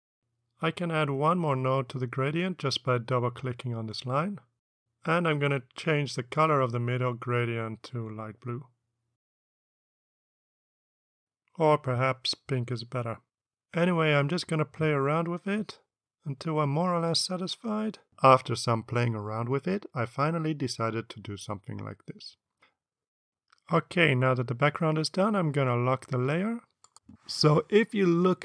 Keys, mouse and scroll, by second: 0.4 click, 1.0 click, 1.3 click, 1.5 click, 1.7 click, 4.2 click, 10.5 click, 11.1 click, 12.6 click, 13.4 click, 14.4 click, 15.1 click, 15.6 click, 17.2 ctrl+click, 18.5 click, 22.3 click, 23.8 click, 26.4 click.